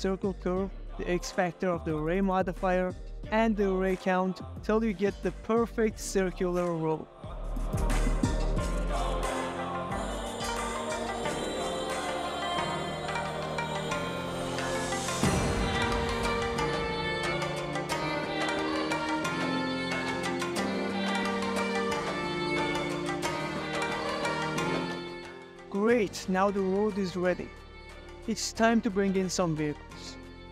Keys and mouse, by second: 0.0 click, 0.1-0.4 middle drag, 0.7-1.8 ctrl+middle drag, 3.2 Escape, 3.5 s, 5.3 Escape, 5.9-6.3 middle drag, 7.3-9.2 drag, 9.5-12.3 drag, 12.7-14.2 drag, 15.0 Escape, 15.2 click, 16.5-17.6 drag, 18.0 click, 19.2 click, 20.3 Escape, 21.5 click, 22.4 click, 23.0 click, 23.7 click, 24.3-25.3 drag, 26.4 click, 26.7 s, 29.7 drag, 30.2 middle drag.